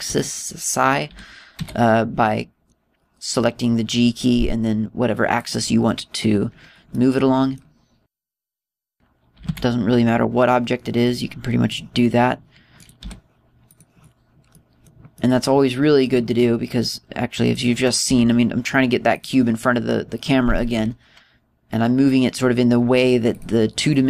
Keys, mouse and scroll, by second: 0.0 g, 1.2 click, 6.5 click, 7.9 middle click, 9.1 right click, 10.4 g, 12.7 click, 13.8 right click, 14.0 g, 14.8 click, 15.5 middle click, 16.2 middle click, 17.4 middle click, 19.1 g, 20.2 click, 21.8 g.